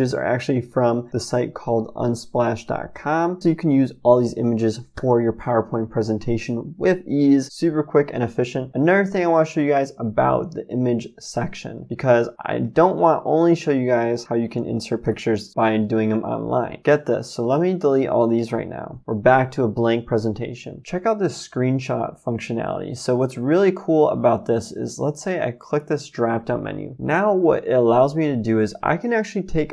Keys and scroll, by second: 15.0 Delete, 16.8 Delete, 18.3 Delete.